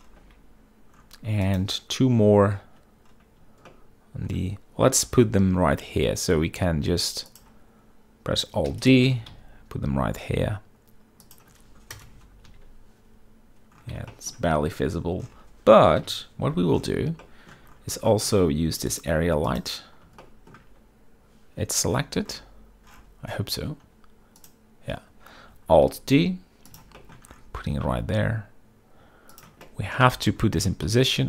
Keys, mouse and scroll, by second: 1.3 typing, 2.2 shift+click, 4.4-5.0 shift+middle drag, 5.7 g, 5.9 y, 8.0-8.8 drag, 9.4 alt+d, 9.5 click, 9.8 g, 10.0 x, 12.7 KP_0, 13.2 z, 14.8 shift+click, 16.7 KP_7, 17.2 z, 17.9 shift+middle drag, 18.8 shift+middle drag, 19.6 click, 20.2 click, 20.9 shift+middle drag, 25.1 click, 26.6 alt+d, 27.7 shift+middle drag, 28.4 g, 30.1 shift+click, 30.4-30.7 middle drag, 30.4-30.7 scroll, 30.7 z.